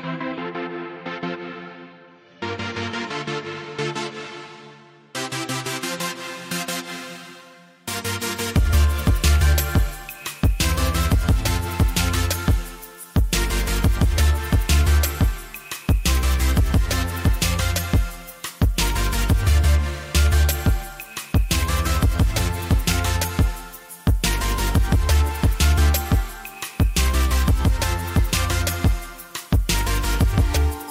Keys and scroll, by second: 2.2 s, 4.3 2, 6.3 ctrl+r, 12.0 s, 19.5 1, 22.2 ctrl+r.